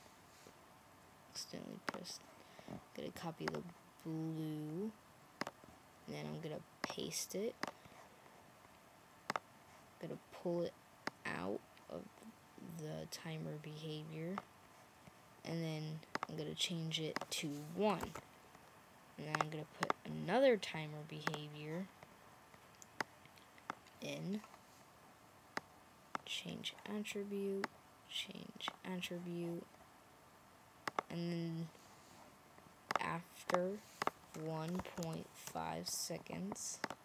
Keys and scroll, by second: 17.9 1, 34.5-35.9 typing.